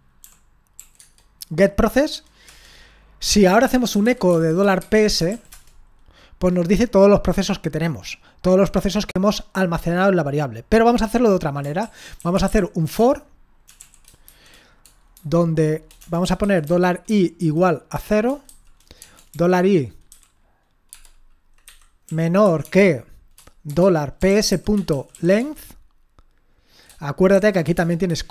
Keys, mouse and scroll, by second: 0.0-0.7 typing, 2.4 Return, 3.4-5.8 typing, 11.8 ctrl+l, 12.2-22.6 typing, 23.7-25.1 typing, 25.4 Tab.